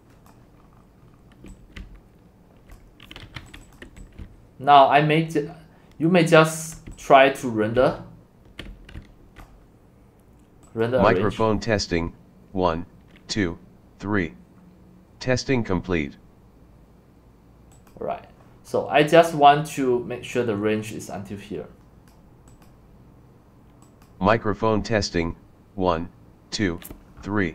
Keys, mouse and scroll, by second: 0.6 click, 0.6-1.0 scroll down 5, 1.0 scroll up 2, 1.1 middle click, 1.2-9.0 typing, 2.7 click, 3.8 click, 6.1 click, 6.8 click, 9.4-15.9 drag, 17.9 click, 18.9-19.9 drag, 22.7 click, 25.7-27.5 drag.